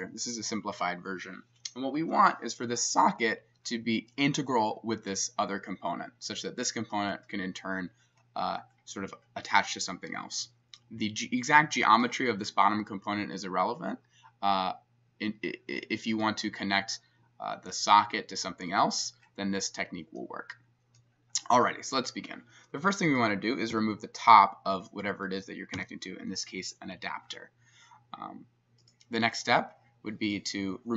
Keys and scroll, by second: 23.7 s, 25.8 x.